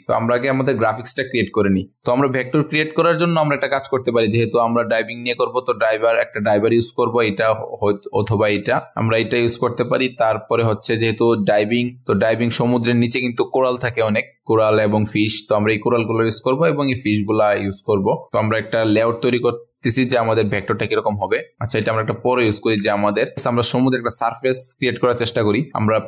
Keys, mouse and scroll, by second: 0.0-1.9 ctrl+scroll down 1, 1.9-2.7 ctrl+alt+scroll up 1, 2.7 space, 2.8-7.5 drag, 3.7 typing, 8.7 click, 8.9 ctrl+alt+scroll down 1, 10.1 click, 10.9-11.8 ctrl+alt+scroll up 1, 11.8-20.1 drag, 22.4-23.0 ctrl+alt+scroll down 1, 23.0 click, 23.3-24.7 ctrl+alt+scroll up 1, 24.7 n, 25.7 right click.